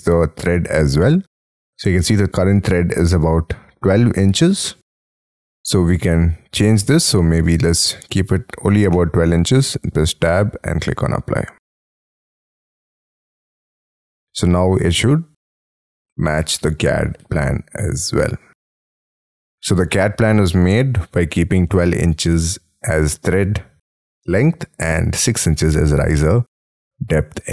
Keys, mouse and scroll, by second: 7.6 2, 8.9 shift+', 9.5 Tab.